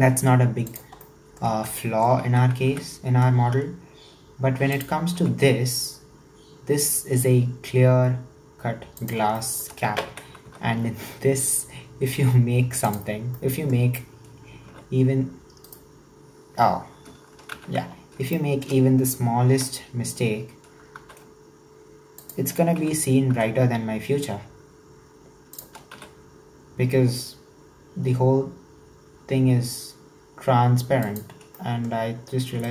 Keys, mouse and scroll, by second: 1.0-2.3 shift+middle drag, 2.3 e, 9.4 shift+middle click, 10.1 e, 13.4-14.7 shift+middle drag, 14.7 w, 15.6 right click, 16.6-17.5 scroll down 2, 17.5 ctrl+z, 18.0-18.3 scroll up 1, 18.3-19.6 shift+middle drag, 19.6 e, 22.8 e, 26.0 s, 31.6-32.7 shift+middle drag.